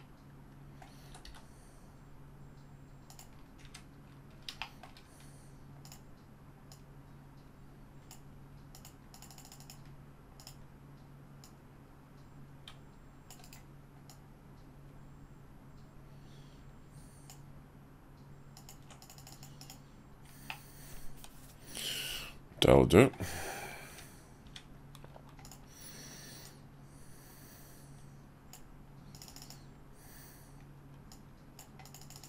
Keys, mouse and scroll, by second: 0.1 middle click, 1.0 s, 3.6 `, 4.7 shift+middle click, 5.8 click, 6.7-8.1 drag, 9.6 click, 10.4 click, 11.4-13.3 drag, 14.1-17.3 drag, 20.5-23.1 middle drag, 24.4 `, 25.4 click, 26.4-28.5 drag, 31.1-31.6 drag.